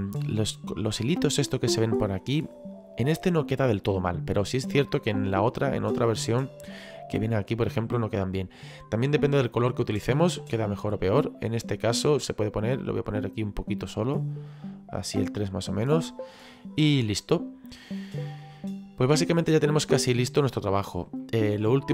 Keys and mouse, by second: 4.7 click, 8.2 click, 10.5 click, 12.5 click, 14.5 click, 15.6 middle click, 17.1 middle click, 18.5 middle click, 21.2 middle click.